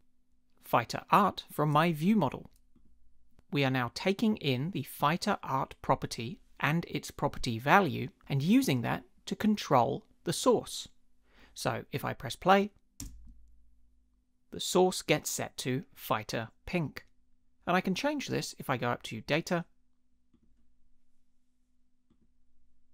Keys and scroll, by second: 13.0 space.